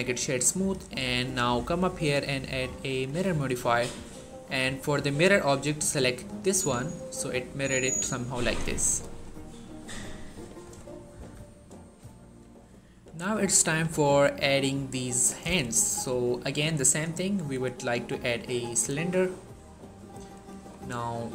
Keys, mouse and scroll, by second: 8.6-10.6 scroll down 1, 10.8 shift+middle click, 11.4-11.9 scroll up 1, 15.4 shift+Num_Lock, 15.4 scroll up 1, 15.5 shift+middle click, 16.5 shift+a, 17.7 click, 18.1-19.4 scroll down 1, 20.6-20.9 scroll up 1.